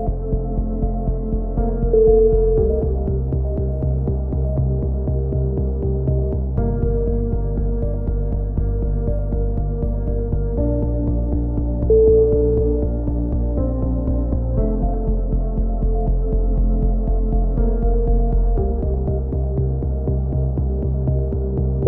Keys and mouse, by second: 0.4 drag, 1.7 KP_3, 2.1-2.7 drag, 2.7 a, 2.9 z, 3.1 z, 3.9 Tab, 6.1 KP_3, 6.3 z, 6.7 Tab, 7.9-8.4 drag, 8.5 k, 10.6 a, 10.7 z, 11.6 drag, 12.2-12.8 drag, 12.8-15.7 right drag, 16.4 ctrl+KP_1, 16.7 z, 17.1 z, 17.9 a, 18.1-18.6 drag, 18.6 KP_1.